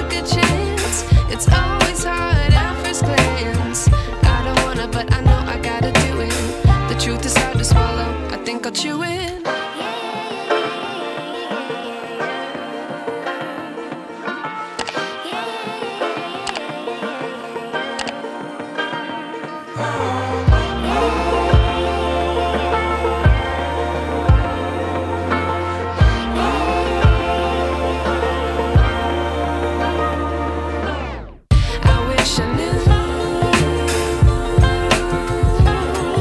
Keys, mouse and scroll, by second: 2.1 space, 2.3-2.9 ctrl+click, 3.5-5.1 drag, 6.9 Left, 8.4 click, 8.9 ctrl+t, 10.3-11.9 drag, 14.0 space, 14.6-14.9 ctrl+click, 21.8 ctrl+a, 23.3 click, 25.5 ctrl+click, 26.4 ctrl+alt+shift+v, 26.9 ctrl+t, 27.2-29.1 ctrl+drag, 30.4-31.0 alt+shift+click, 31.4 space, 31.6 click, 31.9-32.2 space, 32.3-32.9 drag, 35.5-36.2 alt+shift+drag.